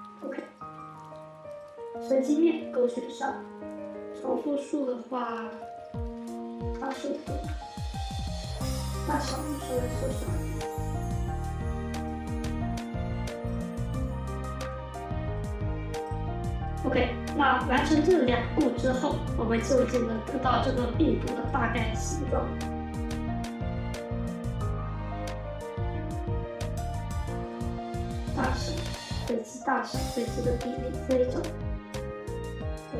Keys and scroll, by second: 6.5 typing, 7.0 Return, 25.9-26.7 typing.